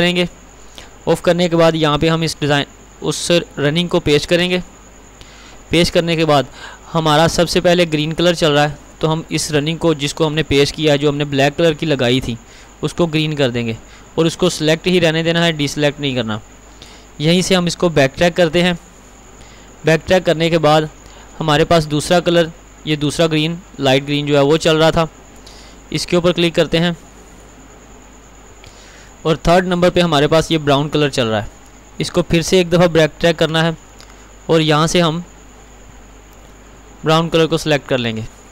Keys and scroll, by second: 4.5 ctrl+v.